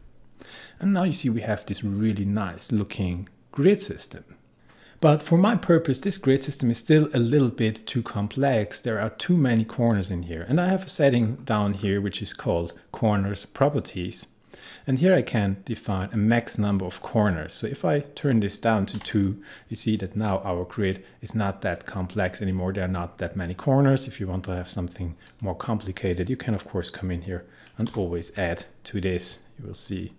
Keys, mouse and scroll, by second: 11.2-13.7 scroll down 1, 18.2 click, 19.0 2, 19.1 click, 25.3 click, 27.9 4, 29.8 click.